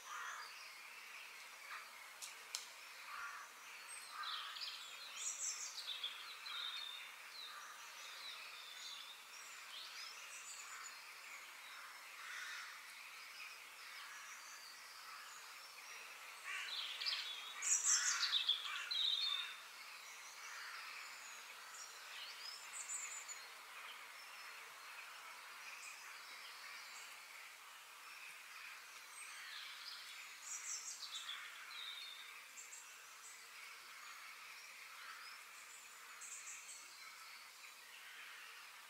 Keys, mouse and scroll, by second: 1.0 click, 1.4 click, 2.6-3.3 scroll down 1, 3.3 click, 4.1 click, 6.8-8.7 middle drag, 9.8-11.8 drag, 12.0-13.4 middle drag, 13.4-14.1 scroll up 2, 14.1 middle click, 14.9 scroll up 1, 15.1 shift+middle click, 16.6 KP_3, 17.5 shift+middle click, 18.1 click, 18.5-19.2 scroll down 2, 20.1 click, 23.5 click, 23.9-25.8 middle drag, 25.8 f, 30.1-32.0 middle drag, 32.6 KP_3, 36.8-38.7 middle drag.